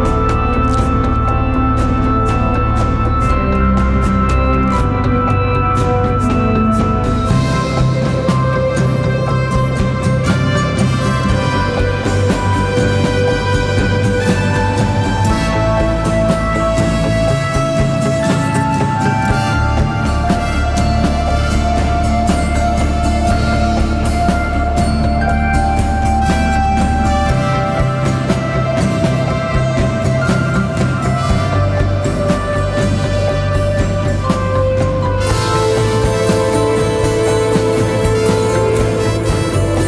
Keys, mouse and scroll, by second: 23.3 ctrl+t, 24.1 alt+shift+click, 27.1 alt+shift+click, 31.5 alt+shift+click, 36.0 Return, 37.5 Down, 38.8 Left, 39.0 Left.